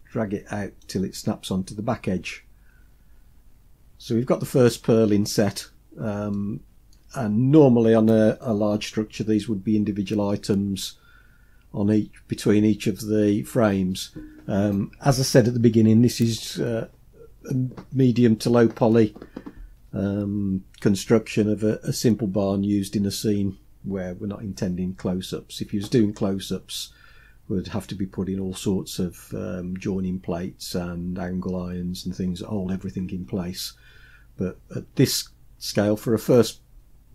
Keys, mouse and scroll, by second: 2.8-3.9 scroll down 8, 4.5-5.7 middle drag, 6.4 middle click.